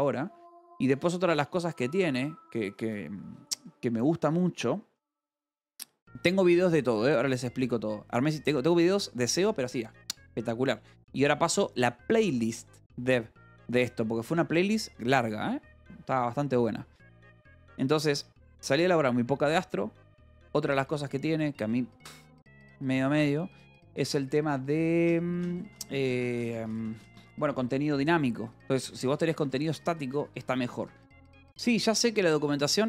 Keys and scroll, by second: 0.0 =, 0.2 space, 28.6-31.6 typing.